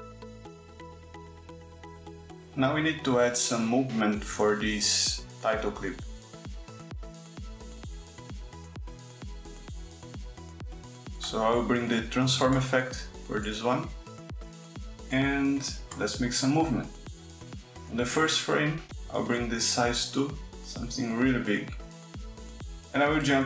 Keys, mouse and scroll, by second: 4.5 click, 10.7 click, 11.5 click, 12.3 click, 14.1 click, 15.0 click, 18.0-22.1 drag.